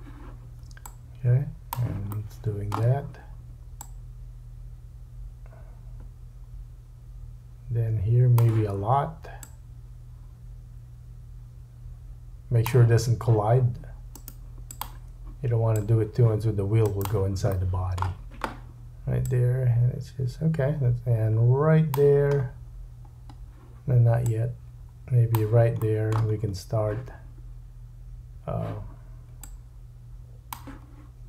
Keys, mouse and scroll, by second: 0.9 click, 2.1 shift+middle click, 3.8 click, 9.4 click, 14.1 right click, 15.7 click, 17.0 click, 17.0-19.3 middle drag, 19.3-31.2 drag, 22.3-24.3 scroll down 5, 25.8 shift+middle click, 26.3-27.3 scroll up 4.